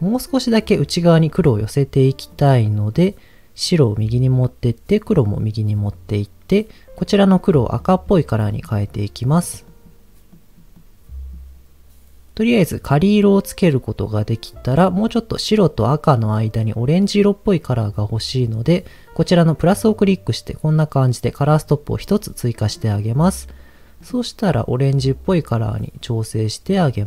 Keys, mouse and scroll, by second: 2.3-3.8 drag, 4.3-5.9 drag, 6.9 click, 17.6 click, 22.2-22.7 scroll up 1, 22.7 click.